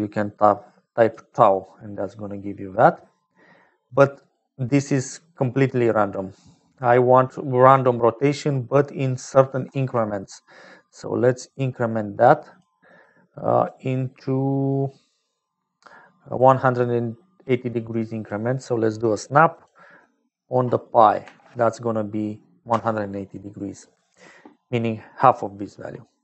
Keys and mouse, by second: 0.6 click, 3.8 click, 5.8 click, 7.6 click, 8.5 click, 9.6 shift+a, 16.1-18.6 drag, 19.4-24.8 drag.